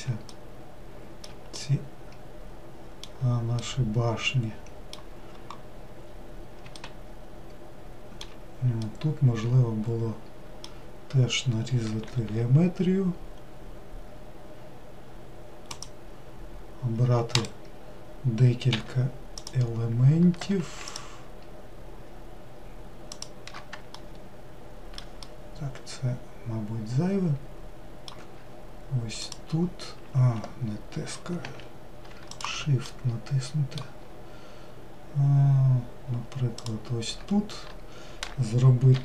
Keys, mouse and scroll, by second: 12.3 ctrl+r, 18.8 3, 19.6 click, 23.3 shift+click, 24.3 alt+middle click, 25.3-29.5 middle drag, 29.5 ctrl+click, 31.6 ctrl+z, 32.5 shift+click, 33.1-36.8 middle drag, 36.8 shift+click.